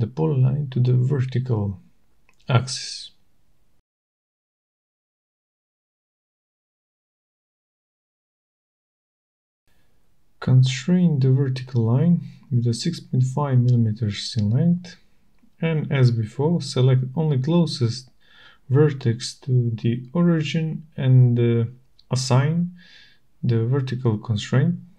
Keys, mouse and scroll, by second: 2.7 right click, 3.9 click, 5.0 click, 8.2 click, 9.8 middle click, 11.8 click, 14.1 click, 16.1 click, 17.3-18.5 typing, 20.3 Return, 22.6 click.